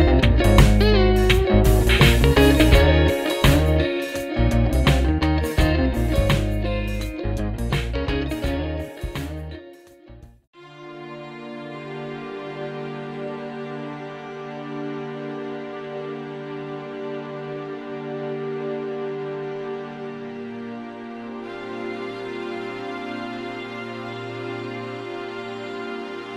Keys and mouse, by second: 2.3 alt+click, 3.3 double click, 11.0 alt+click, 12.2 double click, 16.2 alt+click, 22.1 right click.